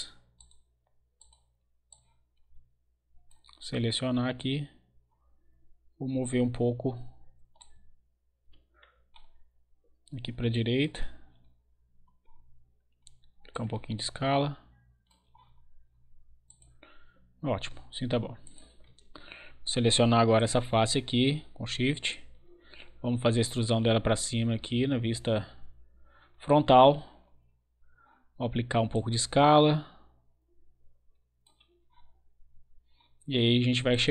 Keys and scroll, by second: 18.8 Escape.